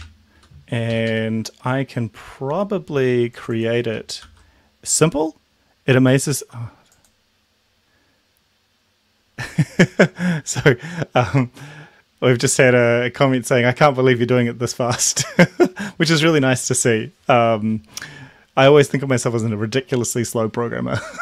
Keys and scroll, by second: 0.4 Down, 0.9 Up, 1.1 Right, 4.3 ctrl+c.